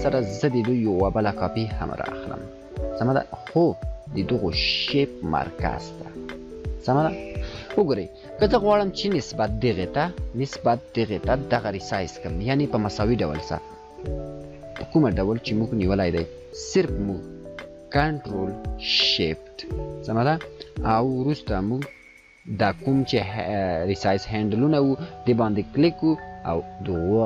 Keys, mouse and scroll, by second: 1.7-4.2 alt+drag, 15.8-27.2 drag.